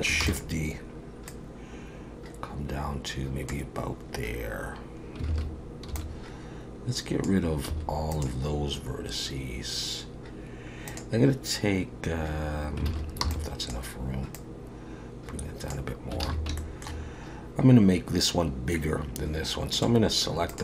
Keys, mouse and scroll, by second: 0.2 shift+d, 1.3 click, 5.3 alt+a, 5.9 b, 7.7 x, 10.9 click, 12.9 alt+a, 13.2 b, 14.4 click, 16.2 alt+a, 16.6 shift+middle click, 19.7 click, 20.5 shift+click.